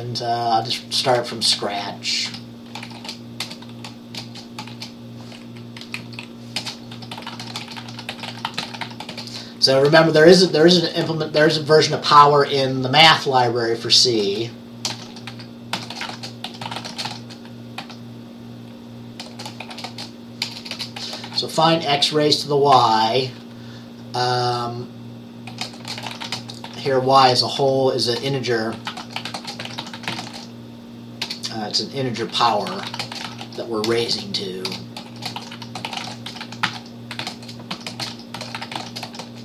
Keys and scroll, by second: 1.5 Return, 2.3-3.0 typing, 3.5 Return, 4.3-5.3 typing, 5.9 Up, 6.1 Right, 6.4-11.5 typing, 14.7-17.8 typing, 19.4-20.8 typing, 22.8 typing, 25.4-39.4 typing.